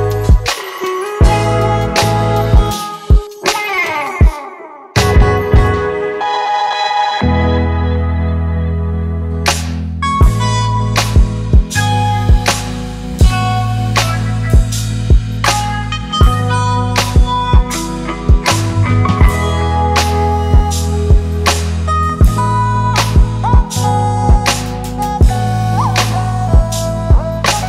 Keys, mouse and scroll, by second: 0.0-0.9 alt+scroll up 1, 3.1 double click, 4.4-6.2 scroll up 1, 7.3-7.9 scroll down 1, 8.0-10.9 scroll up 1, 11.2-11.6 scroll down 1, 14.8 double click, 20.7 ctrl+t, 22.4 ctrl+t, 22.9 alt+shift+click, 27.0 alt+shift+click.